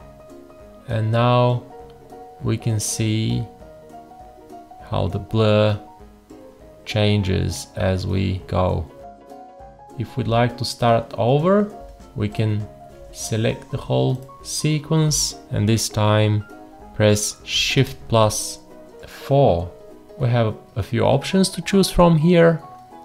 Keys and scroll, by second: 17.8 shift+4.